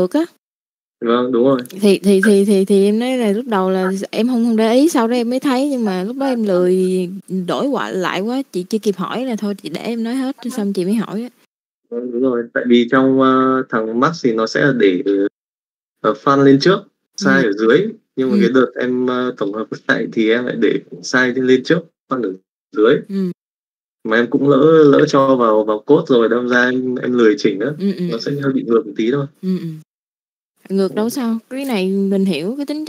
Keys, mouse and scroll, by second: 2.2 middle click, 2.6-5.8 drag, 6.6 middle click, 10.0 middle click, 24.3 click, 24.6 n, 26.2 n, 26.8 click, 30.8 middle click, 31.8 middle click.